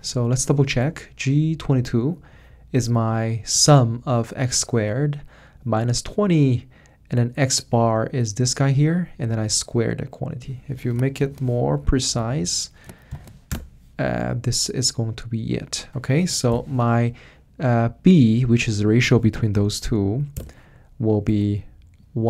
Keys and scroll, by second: 1.0-1.7 typing, 11.2 shift+9, 11.8 Right, 11.9 Right, 12.1 Tab, 12.2 Tab, 12.4 Tab, 13.1 shift+0, 13.5 Return, 16.5 =, 19.5 /, 20.0 Up, 20.3 Return.